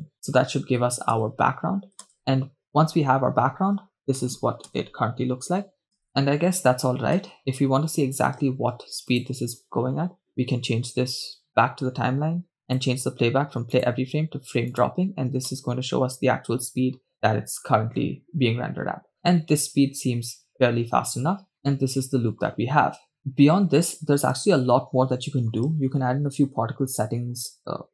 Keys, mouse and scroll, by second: 1.3 shift+space, 2.6 shift+space, 2.9 shift+space, 4.6-7.4 typing, 9.4-11.9 drag, 15.5 click, 17.1 shift+space, 23.2 shift+space.